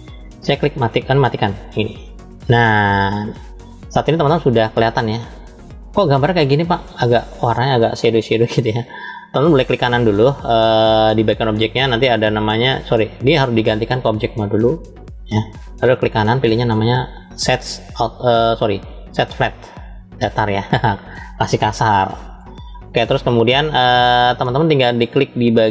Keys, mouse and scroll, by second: 1.9 click, 3.7-4.8 shift+middle drag, 5.8-7.4 middle drag, 11.2-13.2 right drag, 13.2-14.1 drag, 14.9 drag, 15.4 click, 16.1-19.1 right drag, 19.1-25.7 drag.